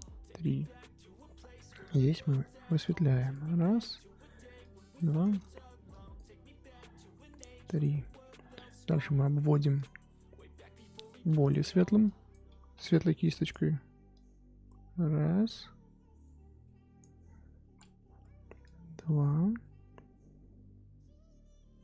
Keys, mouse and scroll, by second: 2.8-5.4 drag, 5.4 ctrl+z, 5.9-9.8 drag, 10.4 f, 12.0 click, 12.8 ctrl+z, 13.1 f, 14.1-21.8 drag.